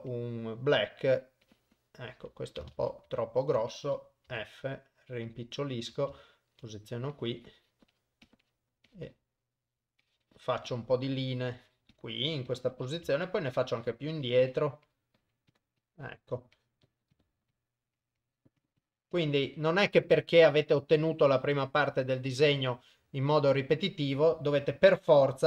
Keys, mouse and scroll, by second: 1.2 click, 1.5 click, 2.9 ctrl+z, 3.2 ctrl+z, 4.4 f, 6.4 shift+right click, 7.2 click, 7.5 click, 7.6 click, 8.1 click, 8.3 click, 8.5 click, 9.0 click, 9.2 click, 10.1 click, 10.4 click, 10.8 click, 11.3 click, 12.4 click, 12.6 click, 13.3 shift+right click, 13.9 click, 14.1 click, 14.4 click, 14.6 click, 15.0 click, 15.5 click, 15.9 click, 16.6 click, 17.3 click, 17.4 click, 17.6 click, 18.0 click, 18.3 click, 18.7 click, 18.9 click, 19.2 click, 19.6 click, 20.1 click, 20.5 click, 20.9 click, 21.5 click, 21.9 click, 22.9 shift+right click, 23.3 click, 23.6 click, 24.7 shift+right click, 25.1 click.